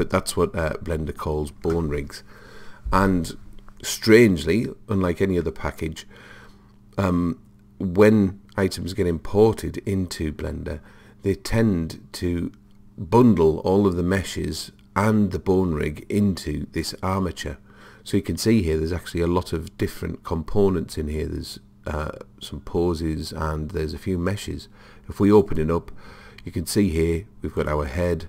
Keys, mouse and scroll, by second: 25.4 click, 27.6-28.2 drag.